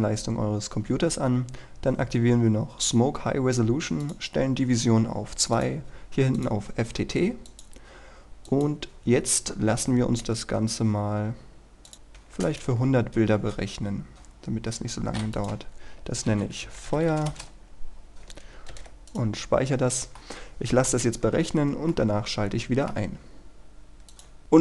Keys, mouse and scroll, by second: 12.3 KP_1, 13.5 Return, 14.2-14.5 scroll down 1, 14.5-15.5 scroll up 1, 15.5 click, 16.1-17.5 typing, 19.2 click, 19.8-20.3 scroll down 1, 20.3-21.3 middle drag, 21.3 scroll up 1, 22.0-23.3 middle drag, 24.2 click.